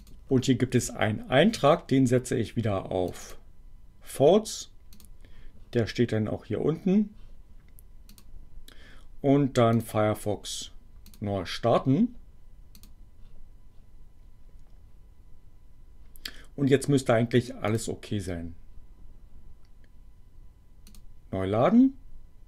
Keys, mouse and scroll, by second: 3.0 click, 4.9 click, 8.1 click, 9.7 click, 11.1 click, 12.7 click, 17.7 click, 20.9 click.